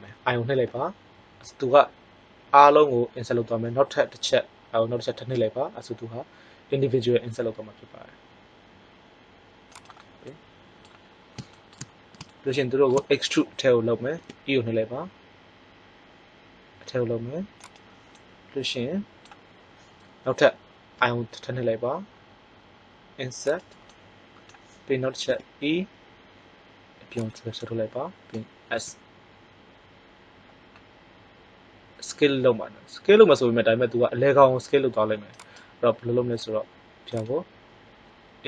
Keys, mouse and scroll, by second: 0.6 i, 10.3-11.3 middle drag, 14.1 e, 17.7 click, 18.4-20.4 middle drag, 20.9 i, 23.9 middle click, 25.2 e, 27.2-28.7 drag, 28.7 s.